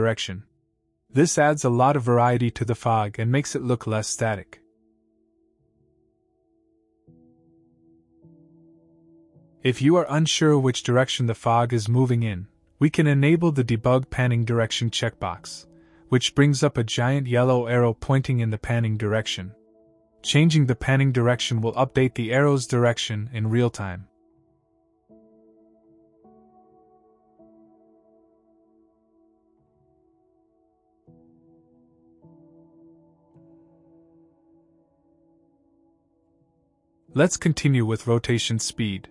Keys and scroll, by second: 16.7 w, 18.0-19.4 typing, 21.7-22.6 typing, 34.7 a, 36.8 s.